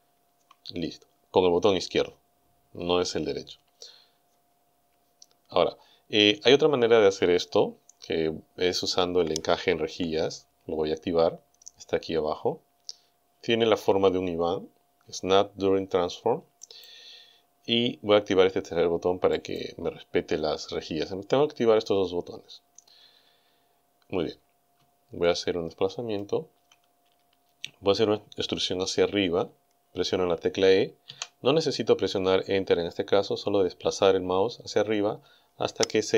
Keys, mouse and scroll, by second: 16.7 click, 19.4 click, 25.2-26.4 shift+drag, 25.2-26.4 shift+middle drag, 25.2-26.4 shift+right drag, 31.1 e.